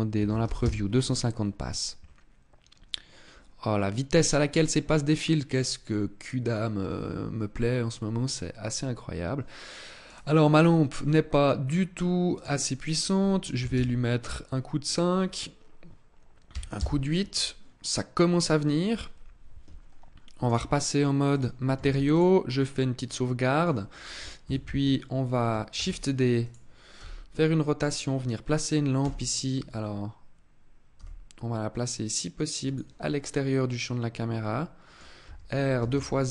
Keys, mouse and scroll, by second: 8.3 click, 9.7 right click, 10.8-11.7 scroll up 8, 12.0 click, 12.6 click, 14.5 click, 20.1 click, 21.5 ctrl+s, 22.2-22.7 scroll down 4, 22.7 middle click, 24.1 KP_7, 25.4 shift+d, 26.2 click, 26.6 r, 27.6 click, 28.6 KP_0, 30.7 g, 32.4 click, 32.7 middle click, 34.9 r.